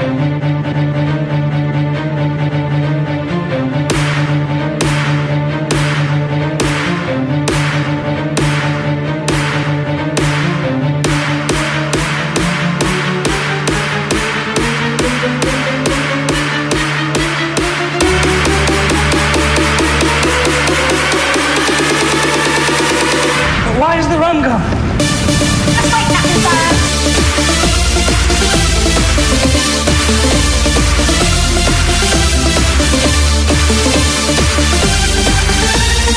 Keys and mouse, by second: 0.1 KP_Subtract, 4.8-7.4 KP_4, 8.1 KP_4, 8.8 KP_4, 12.1 KP_Subtract, 20.1 KP_6, 22.1 KP_8.